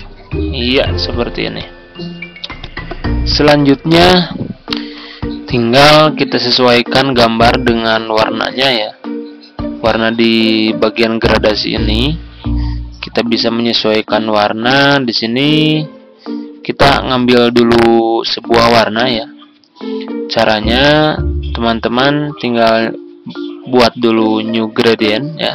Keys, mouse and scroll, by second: 4.7 Delete, 8.0-21.5 drag.